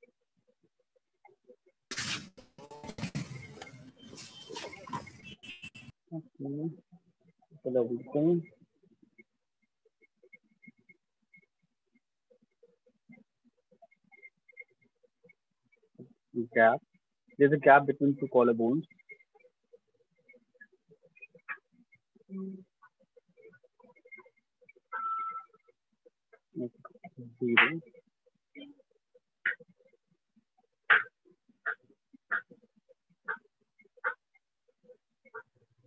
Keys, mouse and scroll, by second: 0.3 click, 1.1 click, 2.6 click, 2.7 alt+click, 2.9 alt+click, 3.1 alt+click, 3.9 alt+click, 4.0 alt+click, 6.6 click, 9.4 click, 10.2 shift+click, 10.7 alt+click, 11.3-13.1 right click, 12.7 right click, 13.1 click, 13.2 click, 13.3 click, 14.9 alt+click, 15.1 click, 15.7 click, 16.4 click, 17.2 click, 17.4 alt+click, 18.5 click, 19.4 click, 19.7 click, 20.7 alt+click, 23.3 shift+click, 23.8-24.9 ], 25.7 click, 26.4 0, 26.5 Return, 30.3 click, 32.8 shift+click, 33.9 right click, 34.4 alt+click.